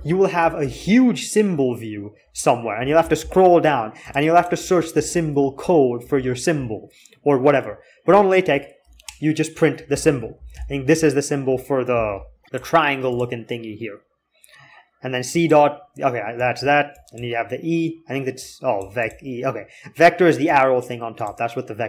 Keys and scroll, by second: 0.4 alt+x, 4.9 alt+x, 9.5-10.8 typing.